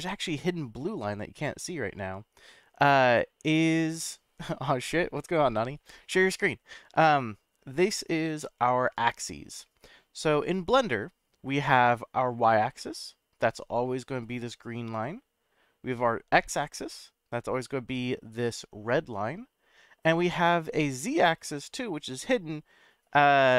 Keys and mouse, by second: 21.4 click.